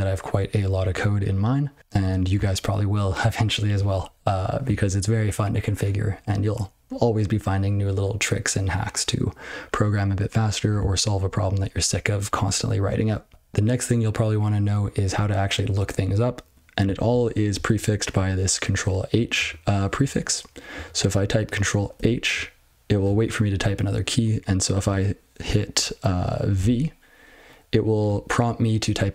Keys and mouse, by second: 2.0 Return, 13.3 ctrl+f, 17.0-17.5 ctrl+f, 18.1 click, 19.1 click, 19.3 click, 20.0 click, 20.0 click, 20.7 click.